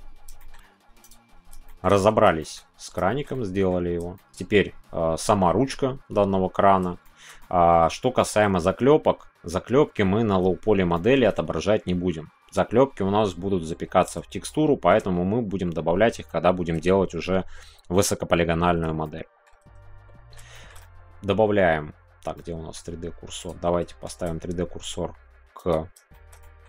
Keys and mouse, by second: 0.4 shift+middle click, 1.6 shift+middle click, 1.9-2.2 middle drag, 2.4 shift+middle click, 3.1 shift+middle click, 3.3 middle click, 4.1 shift+middle click, 7.0 shift+middle click, 7.4 middle click, 8.2 shift+middle click, 8.3 shift+click, 10.9 shift+click, 14.4-14.9 shift+middle drag, 19.0-19.4 shift+middle drag, 20.0 middle click, 20.5 shift+middle click, 22.3-23.4 middle drag, 23.4 click, 24.0 shift+s, 26.1 shift+middle click, 26.3 middle drag.